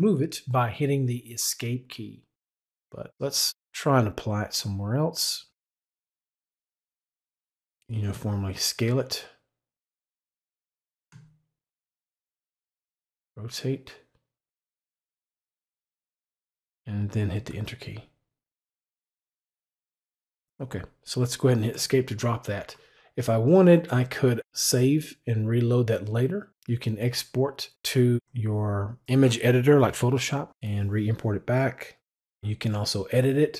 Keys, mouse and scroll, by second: 4.3-7.5 drag, 8.7-15.5 shift+drag, 17.2 Return, 21.5 Escape.